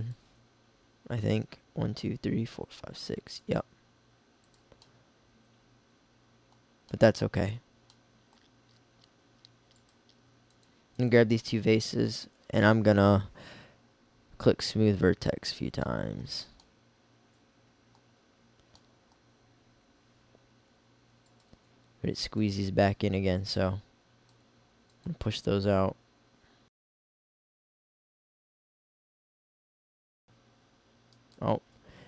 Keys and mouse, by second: 0.2 click, 3.5 g, 4.9-6.8 middle drag, 9.8-12.0 middle drag, 21.3 click.